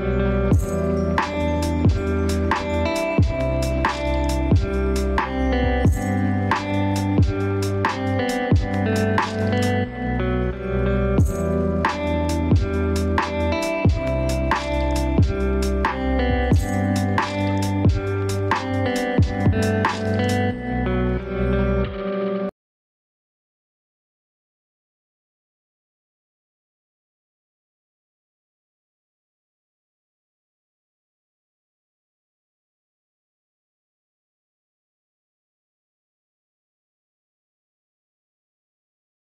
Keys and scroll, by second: 3.4 ctrl+space, 17.3 ctrl+space.